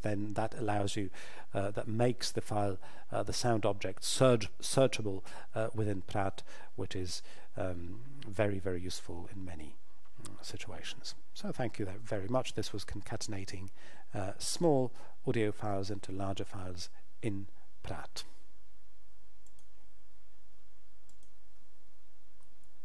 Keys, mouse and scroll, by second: 19.5 click.